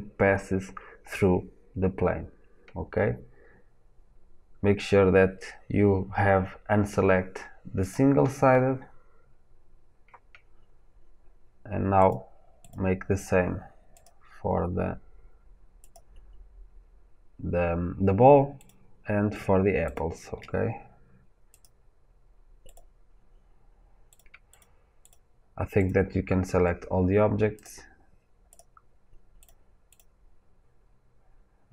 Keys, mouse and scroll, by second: 14.0-19.9 drag, 21.6-22.6 drag, 24.5 shift+click, 27.6-31.7 drag.